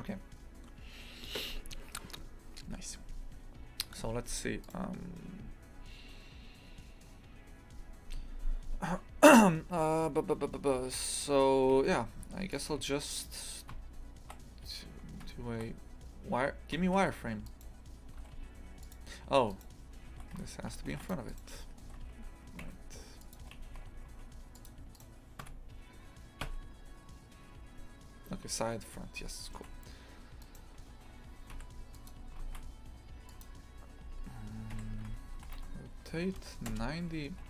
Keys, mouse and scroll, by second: 3.7-4.2 scroll up 1, 4.2 click, 4.6 right click, 11.1 right click, 11.7 g, 15.2 z, 17.4 right click, 18.1 g, 19.5 right click, 20.1 shift+f, 21.2 right click, 21.8 g, 23.4 g, 24.9 right click, 25.4 KP_1, 28.9-29.2 scroll up 1, 29.2-30.4 shift+middle drag, 30.4 right click, 31.5 Delete, 31.9 click, 32.4 shift+a, 34.0 s, 35.0 shift+Tab, 35.4 r.